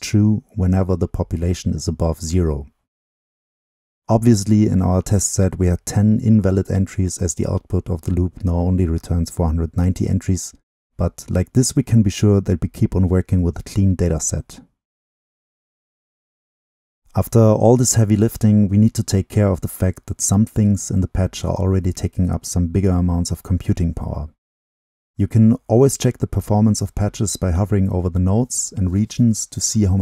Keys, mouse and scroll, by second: 1.5-3.2 middle drag, 1.5-3.2 scroll up 2, 3.2-5.8 drag, 5.8-6.6 right drag, 6.6-7.6 middle drag, 6.6-7.6 scroll up 2, 7.6-8.7 right drag, 9.1 right click, 9.1 click, 12.9-14.7 middle drag, 12.9-14.7 scroll down 2, 14.7-17.3 right drag, 17.3 click, 17.3-18.2 scroll down 2, 18.2-19.5 drag, 19.5-21.0 scroll up 2, 21.0-24.8 drag, 24.8-25.3 scroll up 2, 25.3-26.5 middle drag, 26.5-27.8 drag, 27.8-30.0 middle drag.